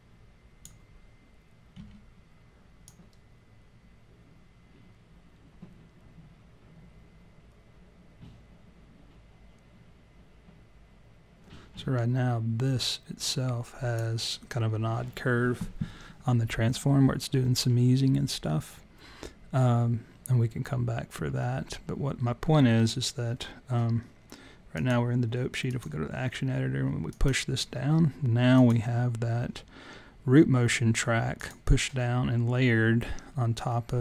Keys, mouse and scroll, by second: 1.8 s, 2.9 click, 24.7 click, 27.1 click, 28.6 click, 31.4 click.